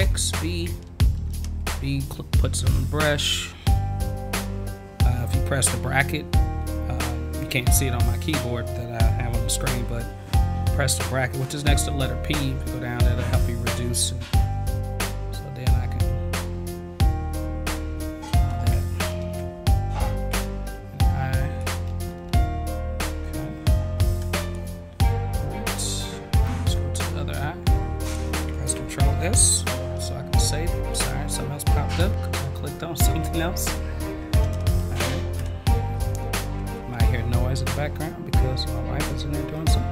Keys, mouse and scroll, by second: 15.3-17.4 drag, 26.4 click, 28.7 ctrl+s, 32.4 v.